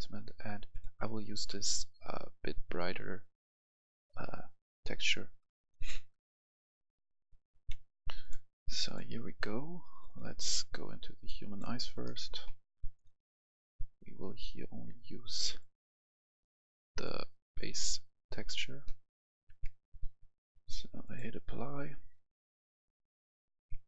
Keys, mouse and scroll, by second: 0.7 ctrl+click, 5.6 click, 7.4 F10, 8.1-11.1 drag, 12.2 Delete, 12.9-19.1 drag, 19.3 F11, 19.4 F10, 21.0 click, 23.5 F10.